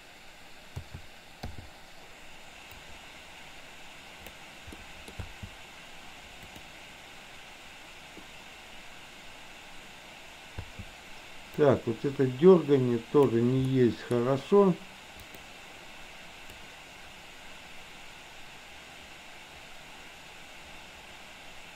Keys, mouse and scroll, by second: 0.8 a, 1.7 i, 2.8-4.4 drag, 4.7-5.0 middle drag, 5.3 space, 10.7 space, 11.8-13.4 drag, 13.8-14.2 middle drag, 16.7-21.7 drag.